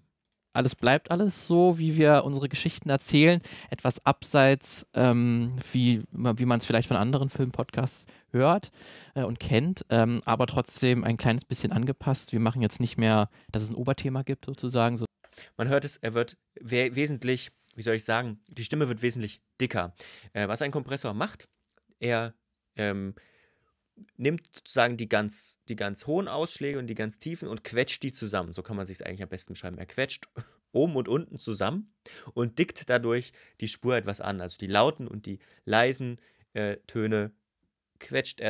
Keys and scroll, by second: 0.3 space, 14.8 space.